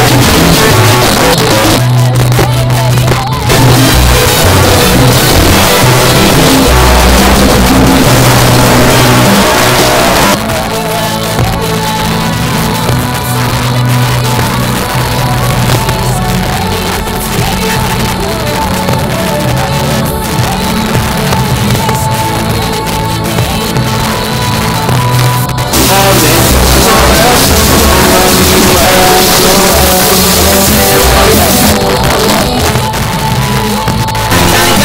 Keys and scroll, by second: 0.9 Page_Down, 9.4 Page_Down, 31.7 Page_Down.